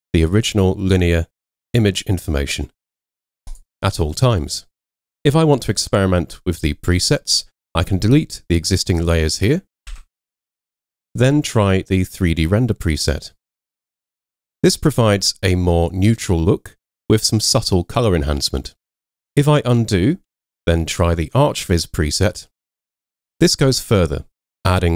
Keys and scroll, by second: 5.6 super+0, 9.9 BackSpace, 20.3 super+z.